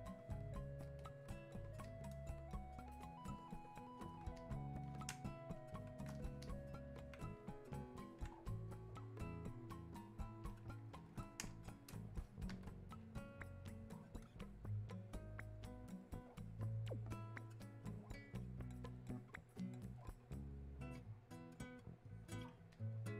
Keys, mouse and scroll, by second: 3.0-4.4 shift+drag, 4.4 click, 5.2 space, 5.6 click, 5.6 space, 6.5 alt+click, 8.0-13.1 drag, 13.1-14.7 drag, 14.7-22.8 drag.